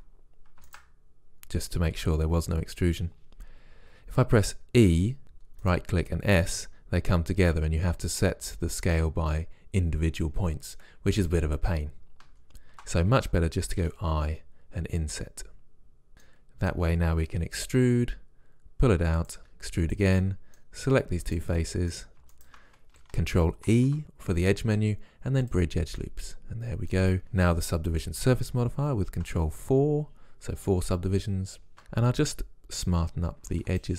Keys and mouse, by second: 4.8 e, 6.0 s, 12.3 ctrl+z, 13.8 i, 17.9 e, 19.4 e, 20.2-23.0 drag, 23.2 click, 23.7 ctrl+e, 29.0 ctrl+4, 31.7 ctrl+r, 33.5 ctrl+r.